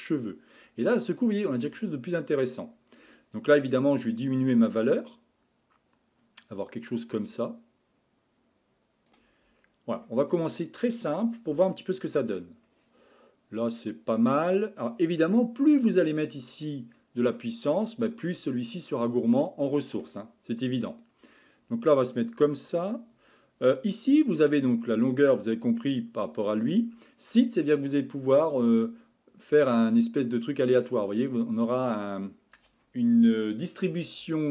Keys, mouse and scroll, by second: 0.0 click, 0.6-1.6 scroll down 9, 1.6 scroll up 7, 4.0-7.1 drag, 9.6 scroll up 4, 10.1-11.0 middle drag, 11.0 scroll up 1, 11.3 scroll down 2, 11.6-15.4 shift+middle drag, 16.7-20.4 middle drag, 20.4-21.0 scroll down 3, 21.0-22.0 scroll up 2, 22.6-23.4 scroll up 1, 30.2-34.5 drag.